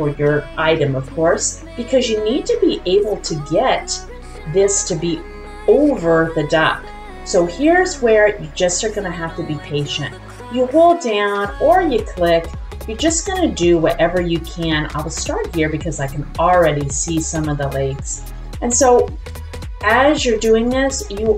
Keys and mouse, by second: 7.4 click, 11.4-20.1 drag.